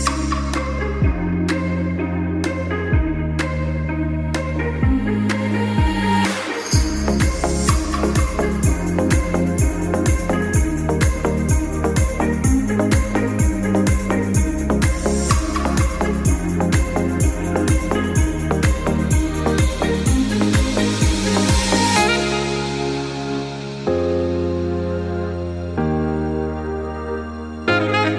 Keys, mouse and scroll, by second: 0.0 ctrl+s, 0.9 click, 1.2 r, 2.0 click, 2.1 g, 3.0 alt+click, 3.1 alt+a, 3.3 scroll down 1, 3.4-3.8 middle drag, 3.8 ctrl+s, 4.5 click, 4.7 g, 6.6 alt+click, 6.6 alt+a, 6.9-7.3 shift+middle drag, 7.3 ctrl+s, 7.5-7.9 middle drag, 7.9 scroll down 2, 8.4-9.1 middle drag, 9.1 z, 9.5 scroll down 2, 9.7-10.1 middle drag, 10.1 z, 13.0 ctrl+s, 13.5 KP_1, 14.5 scroll up 3, 14.9-15.9 shift+middle drag, 15.9 ctrl+s, 16.2 scroll down 1, 17.8 alt+h, 18.9-19.4 scroll up 1, 19.5 alt+a, 20.0 ctrl+s, 20.7-28.1 middle drag.